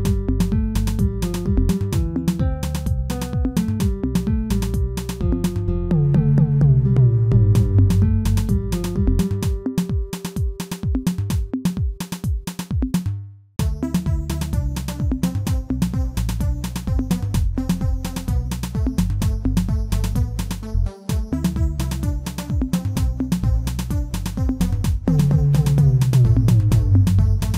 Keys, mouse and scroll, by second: 0.1 KP_1, 1.2 r, 3.3 scroll down 2, 3.6 s, 5.5-6.2 scroll up 1, 6.2 shift+middle click, 6.6-7.3 scroll up 1, 7.3 s, 8.9 scroll down 2, 9.2 Tab, 10.4 alt+h, 10.9-11.6 scroll down 6, 11.6-12.3 middle drag, 12.3 click, 12.7 middle click, 13.5 g, 15.5 click, 16.6 KP_1, 17.0-17.9 scroll up 3, 17.9 click, 18.9 shift+z, 19.2-19.9 scroll up 2, 19.9 click, 20.6-21.1 shift+middle drag, 21.1-22.2 scroll up 2, 22.2-24.2 drag, 24.2-24.6 scroll up 1, 24.6-25.5 shift+middle drag, 25.5 s.